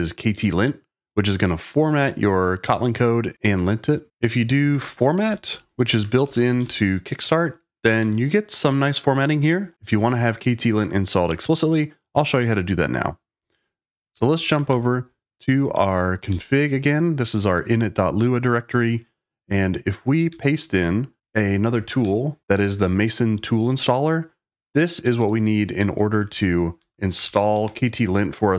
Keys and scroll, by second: 4.5-7.2 typing, 7.9 Return, 14.3 ctrl+a, 14.6 shift+n, 16.2 j, 16.6 k, 20.2 j, 21.2 shift+super+v, 21.2 shift+o, 21.9 Down, 22.4 Escape, 24.9-26.1 typing, 26.7 Escape, 27.2-27.6 typing, 27.5 Return.